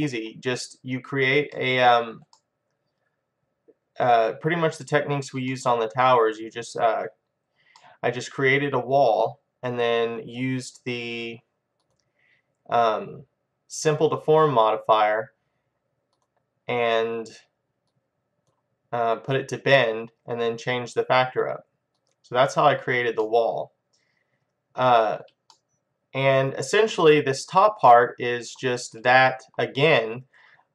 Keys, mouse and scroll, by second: 2.6 middle click, 3.3 middle click, 5.6-10.8 middle drag, 11.9-23.9 drag, 23.3-30.7 middle drag.